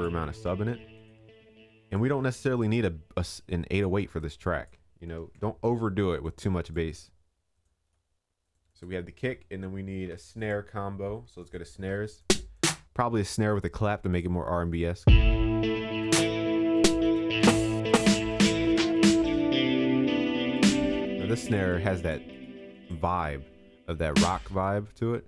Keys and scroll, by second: 5.2 ctrl+s.